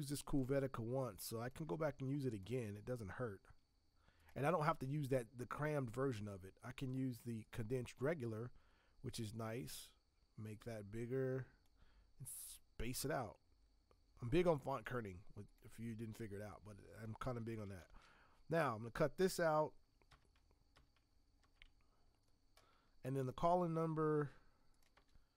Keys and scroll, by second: 17.8 ctrl+x, 24.9 space.